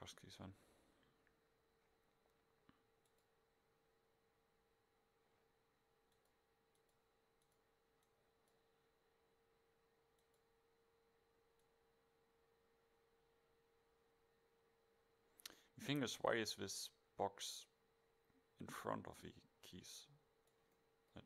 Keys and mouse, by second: 0.1 middle click, 3.1-5.0 drag, 5.0-6.2 middle drag, 6.2 click.